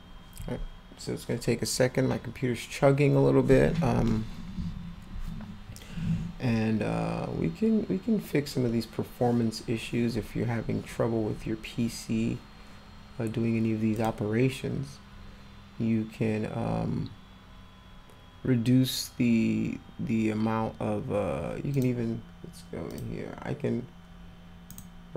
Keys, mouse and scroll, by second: 14.0 click, 21.7 click, 22.9 click.